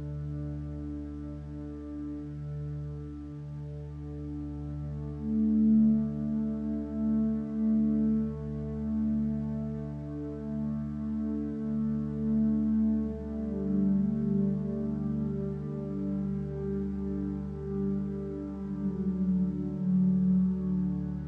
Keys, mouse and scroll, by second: 14.0 ctrl+space.